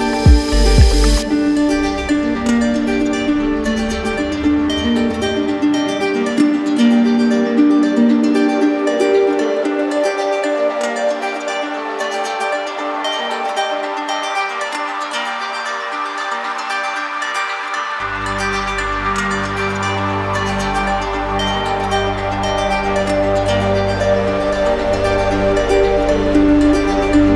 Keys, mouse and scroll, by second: 8.5-9.6 drag, 19.9 right click, 20.5 shift+right click, 21.8 alt+right click.